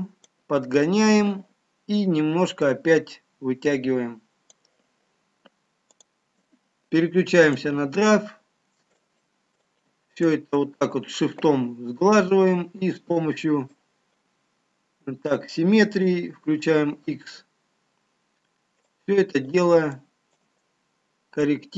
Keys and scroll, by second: 19.9 x.